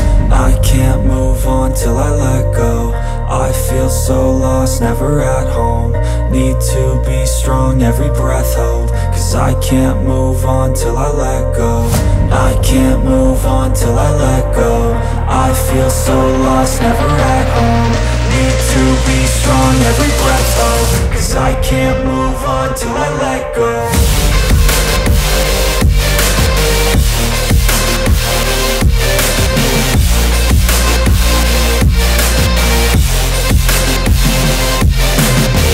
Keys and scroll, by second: 6.3 space, 7.7 Delete, 16.7 space, 24.0 e, 29.9 space.